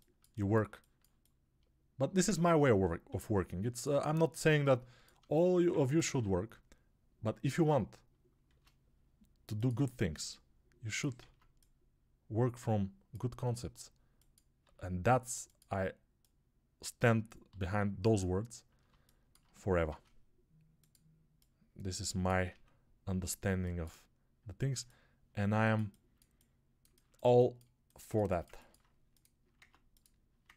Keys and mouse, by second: 5.2 alt+shift+click, 5.2 alt+shift+right click, 5.4-10.9 alt+shift+middle drag, 8.3 shift+d, 10.9-14.5 ctrl+drag, 11.1 ctrl+z, 13.3 s, 14.5-17.3 middle drag, 14.5 g, 17.3-18.7 drag, 17.3 g, 18.7-22.3 shift+middle drag, 19.7 shift+d, 22.3-24.7 drag, 22.3 s, 24.7-27.4 alt+middle drag, 27.8-30.5 alt+shift+middle drag, 29.4 ctrl+Tab.